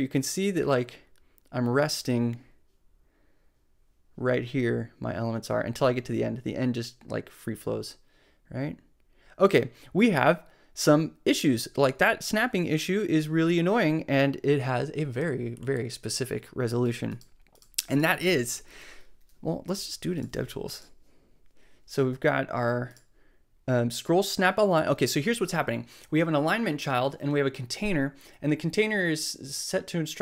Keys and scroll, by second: 20.9 shift+super+c.